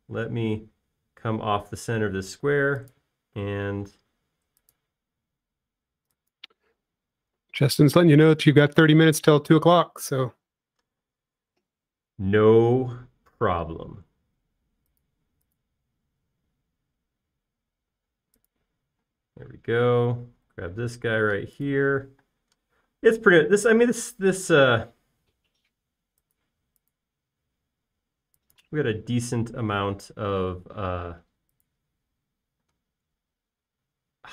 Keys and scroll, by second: 1.0 q, 9.1 space, 12.0 q, 20.4 space, 23.2-24.3 typing, 30.9 space, 33.7 q.